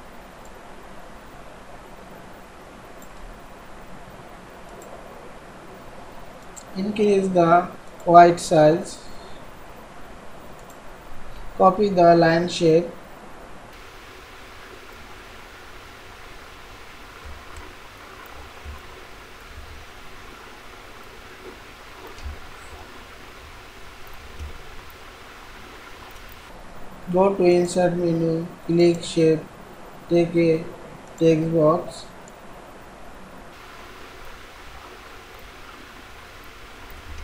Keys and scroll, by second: 36.9 ctrl+c.